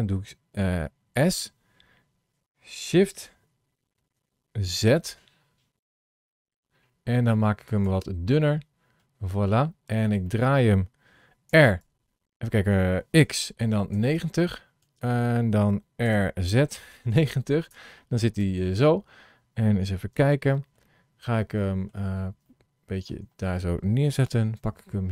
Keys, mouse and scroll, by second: 1.0 s, 8.3-9.6 middle drag, 10.2 middle click, 11.4 r, 15.9 r, 18.3 KP_7, 19.0-19.6 scroll down 4, 20.1 shift+middle click, 20.7 shift+middle click, 22.6 shift+middle click, 24.4 g.